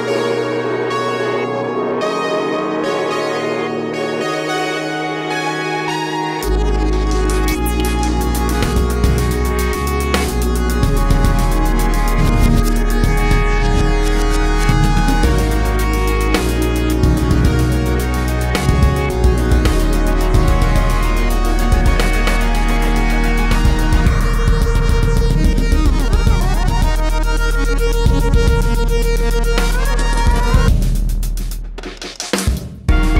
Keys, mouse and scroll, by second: 0.3 click, 1.2-2.6 drag, 2.2 shift+d, 2.9 click, 4.8 click, 7.8 ctrl+s, 8.6 click, 11.2 click, 11.4 click, 12.8-13.2 scroll down 1, 15.2 click, 16.5-18.5 ctrl+shift+drag, 19.2 click, 19.7 click, 21.3 click, 24.3-33.1 drag.